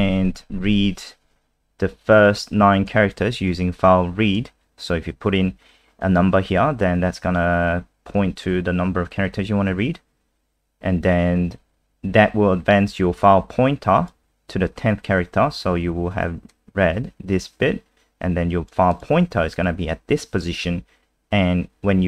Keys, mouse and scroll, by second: 2.9 click, 10.4-13.2 scroll down 1, 13.2 click.